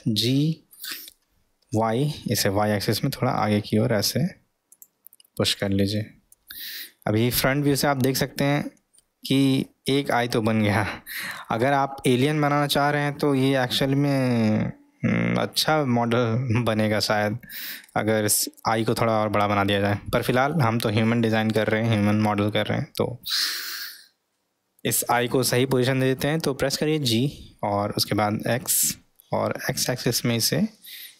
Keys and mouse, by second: 8.0-8.5 middle drag, 9.9-11.6 middle drag, 12.9-13.4 middle drag, 13.8-17.1 middle drag, 17.9-18.5 middle drag, 19.3-19.9 middle drag, 20.0-20.6 middle drag, 23.6-25.0 middle drag, 27.1 g.